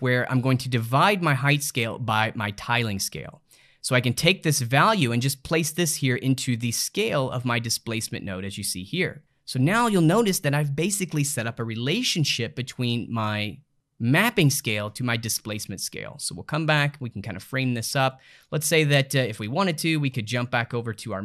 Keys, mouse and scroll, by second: 3.3-4.4 middle drag, 4.4 drag, 7.7-21.2 middle drag.